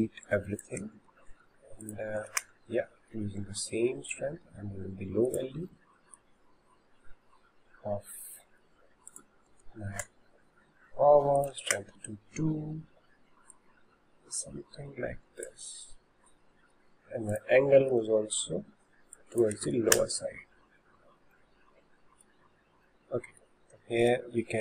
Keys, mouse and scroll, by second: 0.1 click, 0.8 Delete, 1.9-3.7 drag, 3.7 middle click, 4.5 s, 5.9-8.9 middle drag, 9.1-13.7 drag, 17.4-20.5 drag, 21.5-24.1 middle drag, 24.1 click.